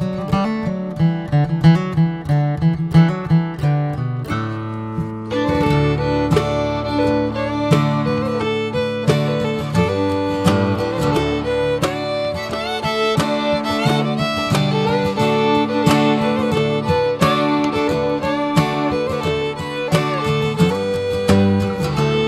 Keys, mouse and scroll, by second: 0.9 click, 3.3 alt+z, 4.0 alt+z, 4.3 click, 5.2 click, 6.1 click, 6.8 click, 9.5 ctrl+r, 10.7 alt+z, 11.2 alt+z, 11.6 click, 12.3 click, 14.3 scroll down 2, 14.5 Tab, 15.9 ctrl+1, 16.3 ctrl+2, 16.6 click, 17.4 alt+z, 17.7 scroll down 3, 18.0-18.4 middle drag, 18.4 drag, 18.9 middle click, 19.3 Tab, 19.5-20.0 scroll up 1, 20.0 middle click, 20.2 scroll up 3, 20.7 Tab, 21.2 scroll down 1, 21.6-22.2 shift+middle drag.